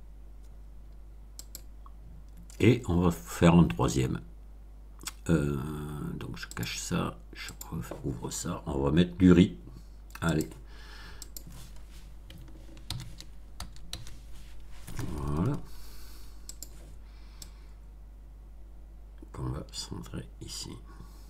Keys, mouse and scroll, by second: 1.4 click, 6.5 click, 7.4 click, 10.3 click, 11.1 click, 12.8 shift+r, 13.5 shift+i, 13.8 z, 16.4 click, 17.4-21.2 drag.